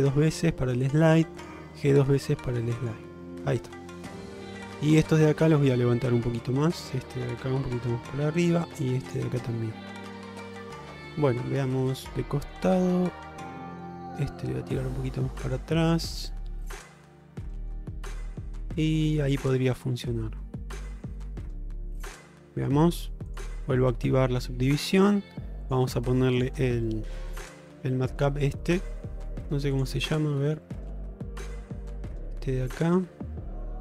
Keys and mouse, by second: 1.4 click, 1.7 g, 4.7 shift+middle click, 5.5 shift+middle click, 6.8 click, 7.7 g, 9.1 click, 9.5 g, 10.8 shift+middle click, 11.5-12.6 middle drag, 13.3 shift+middle click, 14.3-15.6 drag, 15.9 shift+middle click, 17.3 click, 18.3 shift+middle click, 19.0 shift+middle click, 21.9 middle click, 23.4 click, 24.3 Tab, 25.7-27.8 drag, 28.7 shift+middle drag, 29.8-33.8 drag.